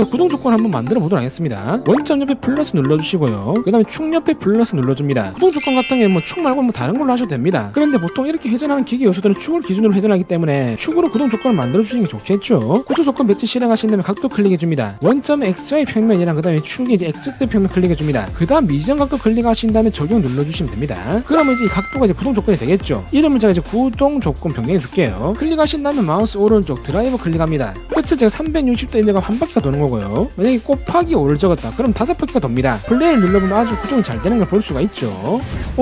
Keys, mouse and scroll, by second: 3.2 click, 4.9 click, 14.7 click, 16.2 click, 18.0 click, 19.5 click, 20.7 click, 21.4 click, 22.2 click, 23.6-25.6 typing, 25.6 click, 26.2 click, 30.1 5, 31.9 click, 33.1 click, 34.5-35.6 typing.